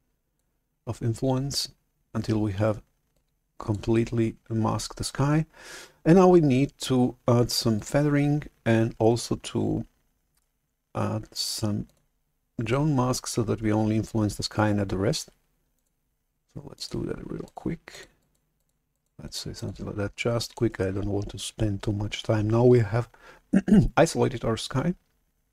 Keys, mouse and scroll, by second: 3.2 click, 7.9-10.3 drag, 11.8 click, 16.6 click, 17.3 click, 17.8 click, 18.1 click, 18.4 click, 18.8 click, 19.1 click, 19.4 click, 20.3 click, 20.6 right click.